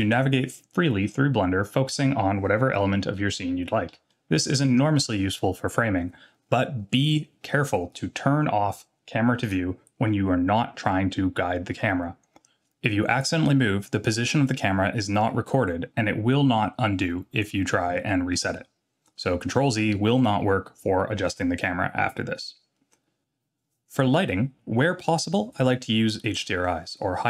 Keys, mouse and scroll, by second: 3.1-3.9 shift+middle drag, 4.1-4.6 middle drag, 9.4 click.